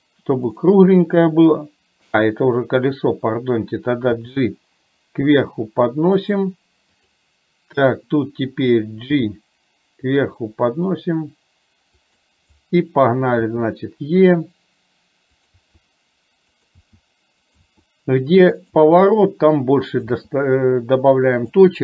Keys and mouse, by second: 7.0 click, 15.6 e.